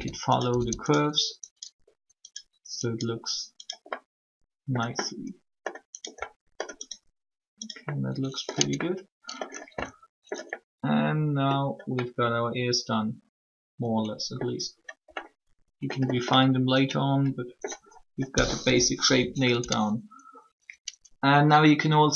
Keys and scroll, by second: 8.5 Tab, 18.5 1, 19.5 Tab.